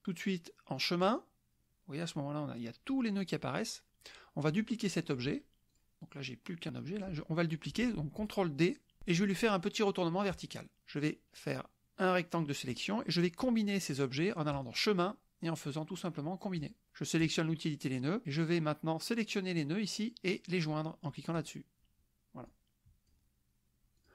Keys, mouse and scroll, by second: 1.0 click, 4.1 click, 5.7 click, 9.0 ctrl+d, 10.3 click, 11.5-12.9 drag, 14.5 click, 16.7 click, 17.2 click, 18.2-19.5 drag, 21.3 click, 22.5-23.3 drag, 24.0 click.